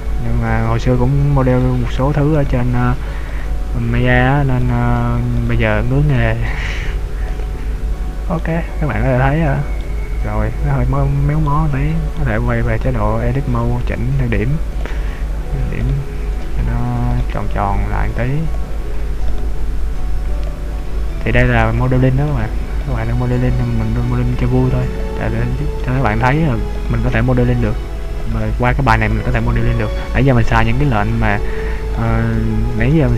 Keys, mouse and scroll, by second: 0.0 shift+right click, 0.5 f, 1.7 right click, 2.5 right click, 3.4 right click, 4.0 f, 4.6 right click, 5.4 shift+right click, 5.9 f, 6.2 right click, 7.4 shift+right click, 8.0 f, 8.4 middle click, 10.2-10.6 scroll down 2, 11.5 middle click, 12.6 Tab, 13.4 Tab, 14.8 click, 15.8 right click, 17.2 right click, 18.0 click, 19.4 right click, 20.1 click, 21.6 click, 22.6 right click, 23.0 right click, 23.7 click, 25.9 middle click, 26.8 right click, 27.6 click, 29.1 click, 29.7 right click, 30.7 middle click, 32.1 right click, 32.9 right click.